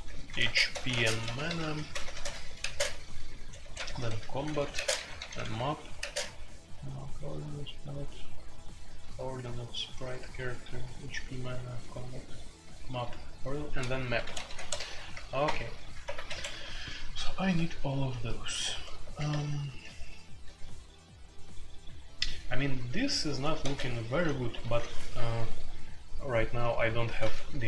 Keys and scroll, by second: 0.0-6.0 typing, 14.1-20.8 typing, 16.0 alt+1, 16.2 Escape, 22.0-22.6 typing, 23.6-24.6 typing, 27.4-27.6 typing.